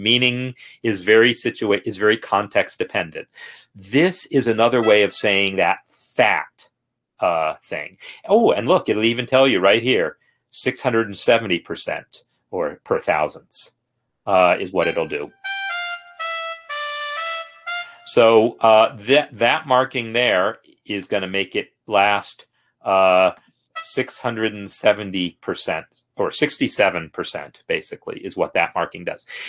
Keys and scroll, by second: 15.3 space, 17.7 space.